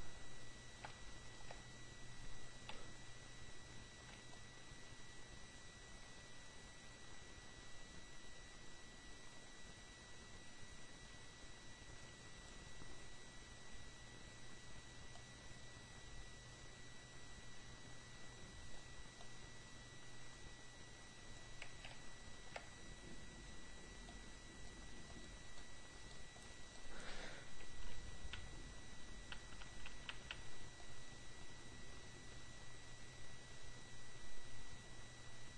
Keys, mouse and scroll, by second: 1.1-1.6 ctrl+scroll up 2, 2.8 ], 4.4-13.1 drag, 15.1-19.4 drag, 22.1-22.9 ctrl+scroll up 1, 24.2-25.3 drag, 25.6 click, 26.3-27.4 drag, 27.7 [, 28.9 [, 30.8-35.5 drag, 30.8 [.